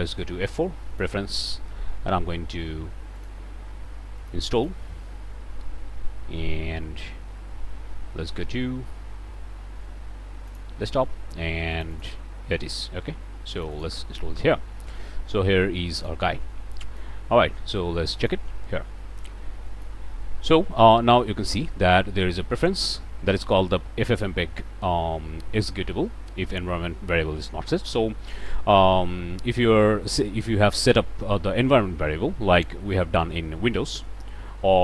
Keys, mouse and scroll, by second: 0.0 F4, 0.9 click, 3.1 click, 3.6 BackSpace, 4.1 click, 4.5 click, 10.4 click, 11.7 click, 12.6 click, 13.5 click, 15.9 click, 16.7 click, 18.2 click, 19.6 click.